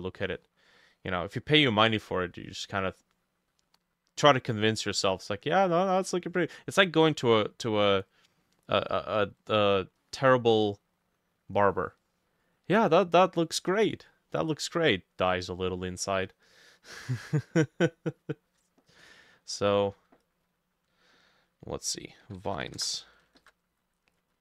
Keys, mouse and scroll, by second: 0.3 middle click, 0.8 scroll down 1, 1.0-3.6 scroll up 1, 8.0 middle click, 8.8 middle click, 9.5 middle click, 11.7 middle click, 18.2-20.2 drag, 20.5-24.4 drag, 22.3-23.3 typing, 23.1 ctrl+middle click.